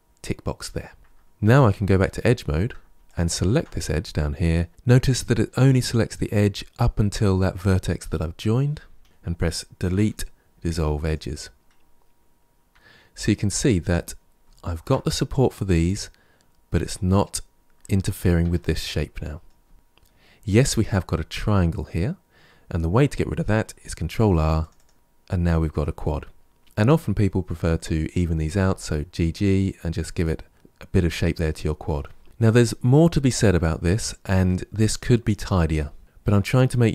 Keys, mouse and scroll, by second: 1.3 2, 2.0-2.9 shift+middle drag, 2.9 alt+click, 9.0 Delete, 10.5-10.8 scroll down 1, 10.8 Tab, 11.4-14.1 middle drag, 14.1-17.2 scroll down 2, 18.3 Tab, 18.8-20.2 middle drag, 20.2-20.9 scroll up 4, 24.0 ctrl+r, 26.6 click, 28.4 g, 30.6 Tab, 32.2-34.4 scroll down 3.